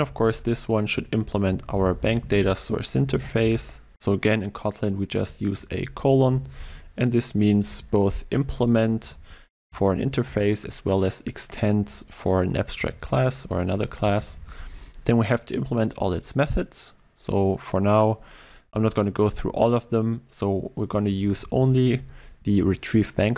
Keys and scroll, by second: 3.9 ctrl+space, 5.3 Return, 13.0 ctrl+i, 14.1 shift+Down, 18.8 Tab, 19.5 shift+Tab, 22.4 ctrl+w.